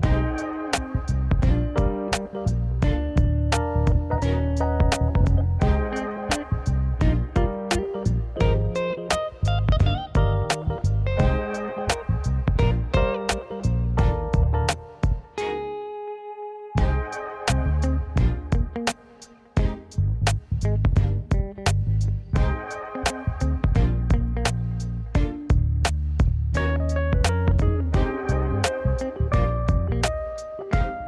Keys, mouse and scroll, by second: 2.1 r, 2.9 click, 3.0-3.8 middle drag, 6.1 r, 7.9 g, 9.2 drag, 9.4-10.3 middle drag, 10.9 click, 11.2 `, 12.0 r, 13.6 s, 14.6 drag, 14.7-15.7 middle drag, 16.4-17.0 middle drag, 17.0 click, 17.7-18.6 middle drag, 20.3 `, 21.0 `, 22.5-23.5 middle drag, 23.5 click, 23.7-24.7 middle drag, 25.7 g, 27.9 ctrl+z, 28.2 click, 28.5 middle click, 29.0 click, 30.1-31.0 middle drag.